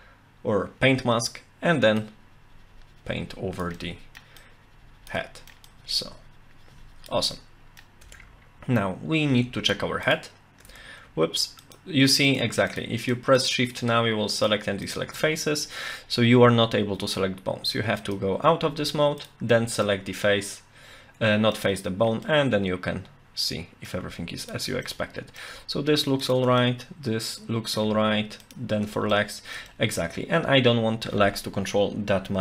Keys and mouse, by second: 2.0-3.6 drag, 3.8 middle click, 4.4 click, 5.2 middle click, 5.7-7.1 drag, 7.3 middle click, 8.1 Tab, 9.3 Tab, 10.1 shift+click, 12.3 shift+click, 12.7 shift+click, 13.0 shift+click, 13.3 shift+click, 14.9 shift+click, 18.0 click, 19.2 shift+click, 19.8-21.5 middle drag, 22.2-23.9 middle drag, 24.4 shift+click, 24.8 middle click, 26.2 shift+click, 26.6-27.8 middle drag, 28.4 shift+click, 29.1 shift+middle click, 29.7-31.7 middle drag.